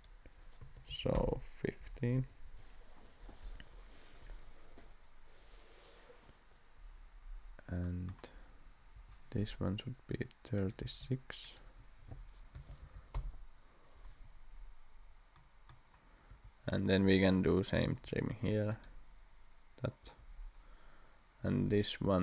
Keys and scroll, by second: 0.6 1, 0.9 5, 1.1 Return, 8.9 Escape, 10.8 d, 12.5 3, 12.8 6, 13.1 Return, 16.3 Escape, 18.0 t, 20.0 Escape.